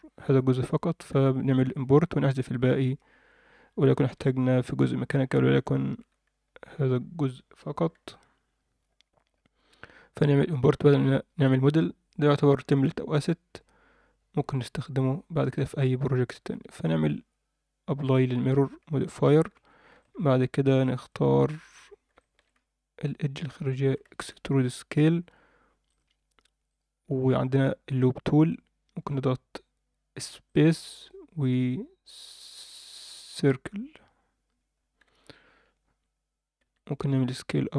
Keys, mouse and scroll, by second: 1.2 Tab, 2.1-2.6 scroll down 2, 2.6 Tab, 3.6-4.0 scroll up 1, 4.0 scroll down 1, 4.1 Tab, 4.8-5.8 scroll up 3, 7.9 d, 8.1-10.1 drag, 10.1 d, 10.8 Tab, 10.8 d, 11.8-12.3 scroll down 2, 12.2-12.9 scroll up 2, 12.9-13.8 scroll down 3, 14.3-15.0 drag, 15.7 Tab, 17.0-17.7 drag, 18.1 Tab, 19.1 ctrl+a, 19.5 Tab, 20.0 shift+middle click, 20.8 click, 21.0 click, 21.8 scroll up 1, 22.1 alt+shift+middle click, 22.5 scroll up 2, 23.8 e, 26.6-34.0 right drag, 34.7-35.4 scroll down 2, 35.0 Tab, 35.4-35.8 scroll up 2, 35.8 Tab, 36.6 s.